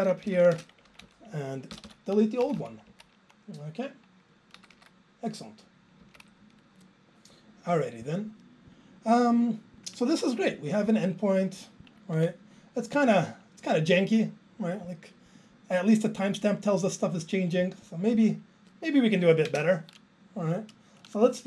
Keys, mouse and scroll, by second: 0.0-1.0 typing, 1.0 Up, 1.9 ctrl+k, 2.0 ctrl+k, 3.9 Down, 3.9 Left, 6.5 super+s, 6.6 Up, 8.1 click, 8.2 click, 19.5 alt+space.